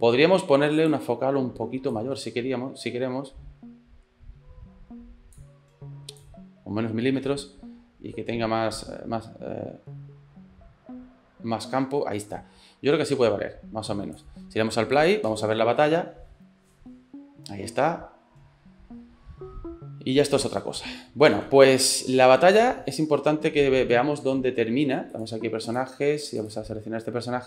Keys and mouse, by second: 0.5 click, 1.1 middle click, 1.9-5.4 drag, 6.3-7.7 drag, 7.7-12.2 middle drag, 12.2-14.3 drag, 15.0 click, 15.3 space, 20.6 middle click, 21.4 space, 25.1 click, 25.7 click, 26.4 click.